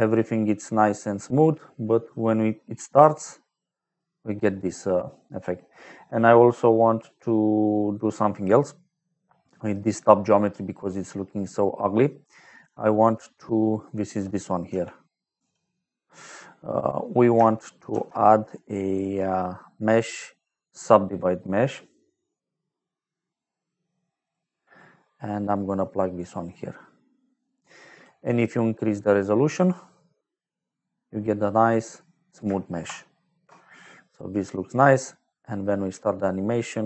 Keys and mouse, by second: 0.8 middle click, 2.0 click, 8.8 middle click, 11.1 middle click, 11.9 click, 13.1 middle click, 13.9 click, 14.6 m, 17.8 shift+a, 24.1 click, 26.1 click, 27.3 click, 29.4 click, 32.8 shift+click, 36.1 click.